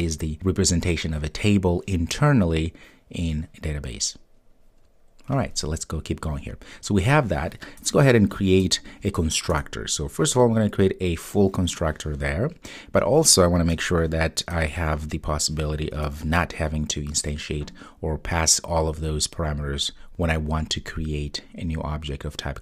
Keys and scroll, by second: 8.7 super+n, 14.6 super+n.